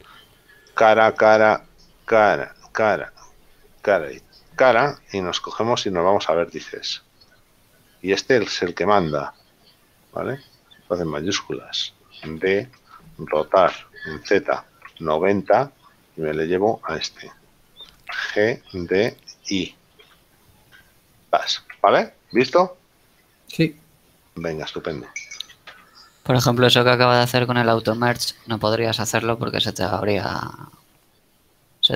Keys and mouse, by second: 2.0 shift+right click, 4.6 shift+right click, 7.3 click, 8.6 shift+right click, 12.7 shift+d, 13.0 Return, 13.0 KP_Enter, 13.7 r, 14.3 z, 15.0 KP_0, 16.3 Return, 16.3 KP_Enter, 18.3 g, 20.3 y, 21.4 click, 28.1 click, 29.1 middle click, 30.4 shift+middle click.